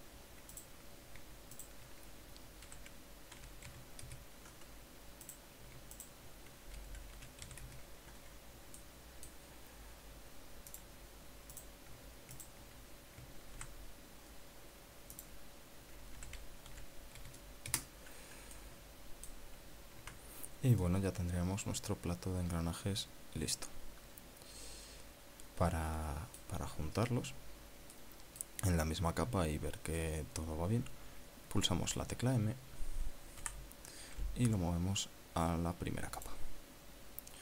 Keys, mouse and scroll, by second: 0.3 KP_Enter, 1.6 right click, 2.6 alt+shift+right click, 3.7 r, 4.4 z, 4.9 KP_6, 5.2 KP_Enter, 6.3 right click, 7.0 alt+shift+right click, 7.8 r, 8.3 z, 8.7 KP_Enter, 9.8 middle click, 11.7 click, 12.6 right click, 13.4 shift+right click, 14.6 shift+g, 16.2 click, 17.2 r, 17.8 z, 18.3 KP_1, 18.5 KP_0, 18.7 KP_Enter, 19.6 click, 20.5-20.8 scroll down 1, 21.1 Tab, 21.8 scroll down 1, 21.8-27.7 middle drag, 29.0 middle click, 34.5 m, 37.3 click.